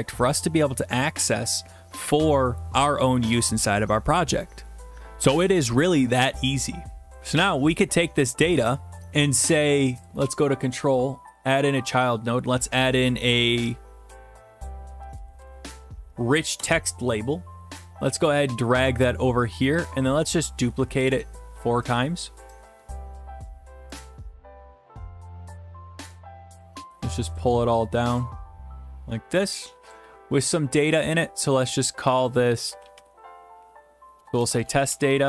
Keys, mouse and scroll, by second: 7.1 click, 10.1 click, 10.2 right click, 11.4 click, 14.0-16.0 typing, 16.6 Return, 18.4-20.3 drag, 20.7 ctrl+d, 21.9-22.9 drag, 23.2 shift+click, 26.6 click, 27.4 click, 29.9 click, 31.0 click, 31.2-33.0 drag, 32.7-33.1 typing, 34.2-35.2 typing.